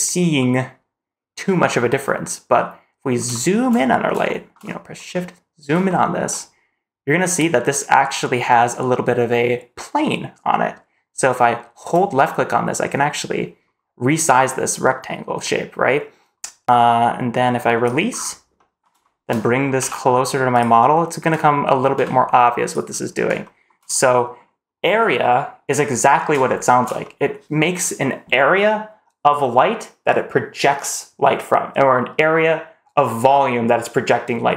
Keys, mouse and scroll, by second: 0.2-1.2 middle drag, 1.5-2.3 scroll down 1, 3.1-3.5 shift+middle drag, 3.5-3.8 scroll up 2, 4.1-4.5 shift+middle drag, 4.5-5.0 scroll up 1, 5.0-5.5 middle drag, 5.7 shift+middle click, 11.8 click, 11.9-17.8 drag, 18.0-18.5 scroll down 2, 18.5 middle drag, 18.9 shift+middle drag, 19.7 g, 20.9 middle drag, 21.2-21.9 scroll up 2, 21.9 g, 22.9 scroll up 2, 23.3 shift+middle click, 24.0 middle click, 26.4 shift+middle drag, 26.9 middle click.